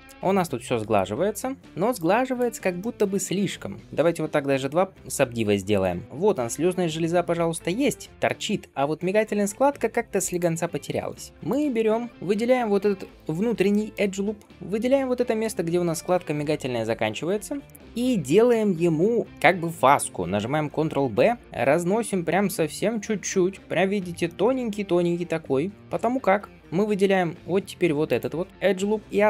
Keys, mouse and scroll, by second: 0.9-1.4 scroll up 1, 1.8 click, 2.6 shift+middle click, 5.9 click, 6.0 middle click, 6.0-6.8 scroll up 1, 6.8-7.7 scroll down 2, 7.3-7.7 scroll up 1, 7.9-9.2 scroll down 1, 10.1 click, 10.7-11.0 scroll up 2, 11.0 Tab, 11.3 alt+z, 11.3 alt+click, 12.1 shift+middle click, 12.1 scroll down 1, 13.6 shift+middle click, 13.8-14.4 shift+scroll up 2, 14.5-15.8 middle drag, 14.5 alt+shift+click, 17.2 scroll down 1, 17.5 shift+middle click, 17.8-18.3 scroll up 2, 18.3 middle click, 21.3 ctrl+b, 23.5-24.1 scroll up 3, 24.1 shift+middle click, 24.5 scroll up 1, 25.7 alt+click, 25.7-26.4 scroll down 2, 26.4-27.9 scroll down 1, 27.9 click, 28.4 scroll down 1, 28.5-29.2 middle drag.